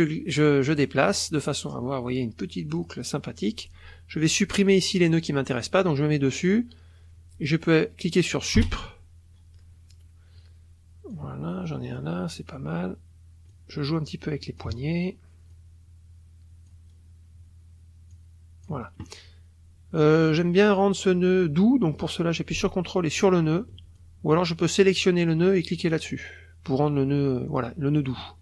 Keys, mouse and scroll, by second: 2.8 click, 5.1-6.7 drag, 8.6 Delete, 11.1-12.2 drag, 13.5-14.8 drag, 15.5-16.9 drag, 18.1 click, 23.2 ctrl+click, 24.0-25.0 ctrl+drag, 28.1 click.